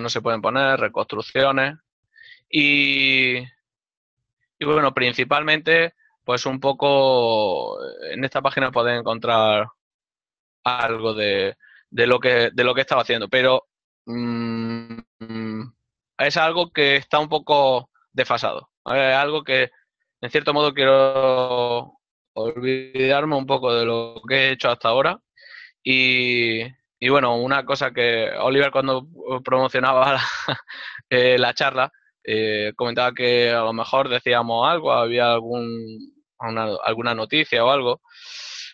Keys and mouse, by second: 0.4 click, 9.8 click.